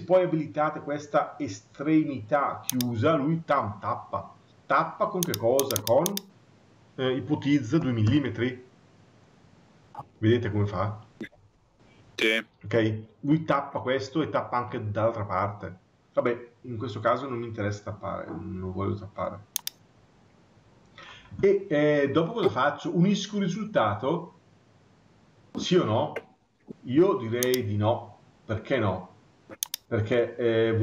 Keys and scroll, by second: 7.8 Return.